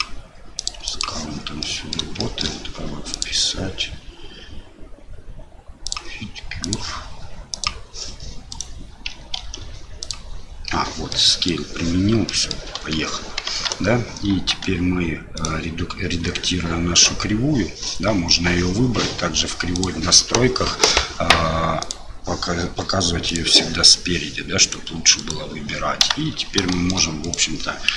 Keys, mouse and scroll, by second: 0.9 click, 1.6-1.9 middle drag, 2.2 shift+middle click, 3.1-5.9 drag, 6.7 click, 8.5 click, 9.4 ctrl+a, 11.2 middle drag, 12.3 middle drag, 12.8 KP_7, 13.5 Tab, 15.4 click, 16.2 Tab, 16.9 click, 19.8 click, 21.8 click, 23.3 click, 24.6 click, 25.2 right click, 26.3 Tab, 26.7 shift+middle click, 27.2 right click.